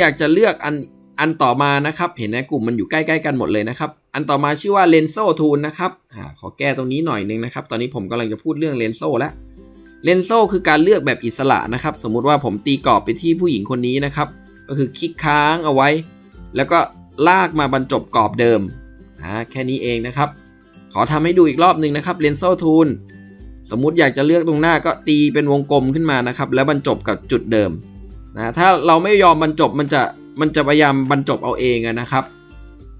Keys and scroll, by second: 7.5 ctrl+b, 8.7 ctrl+b.